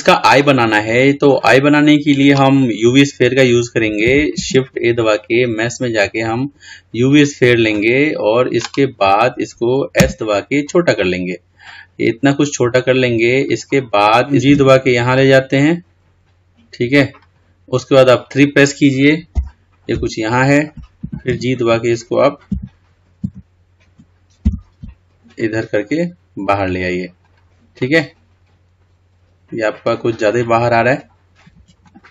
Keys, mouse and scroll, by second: 1.5-2.5 drag, 19.6 KP_3, 21.5 g, 28.0-31.1 middle drag, 31.2-32.1 scroll up 7.